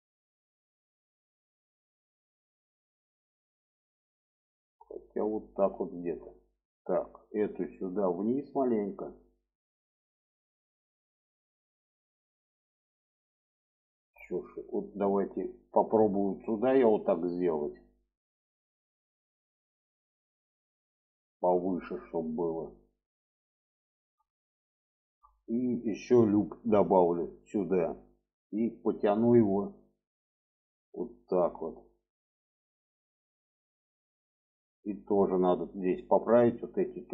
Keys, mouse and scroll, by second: 5.6 shift+middle click, 6.4 click, 6.9 click, 7.9 click, 9.0 click, 9.8 shift+middle click, 10.9 shift+middle click, 11.9 shift+middle click, 14.2 click, 15.5-17.6 drag, 20.1 shift+middle click, 21.0 shift+middle click, 22.7 shift+middle click, 23.6 shift+middle click, 24.6 shift+middle click, 26.1 click, 27.1 click, 28.7 click, 30.3-32.3 drag, 32.7 click, 33.2-34.3 middle drag, 34.7 shift+middle click, 36.0 click.